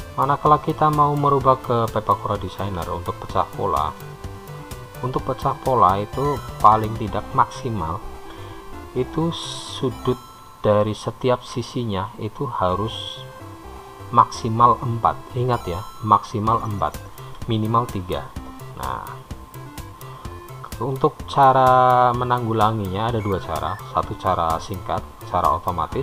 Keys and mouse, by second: 0.5 click, 3.8-5.2 shift+drag, 6.7-8.2 shift+drag, 22.2 middle click, 22.4-23.6 drag.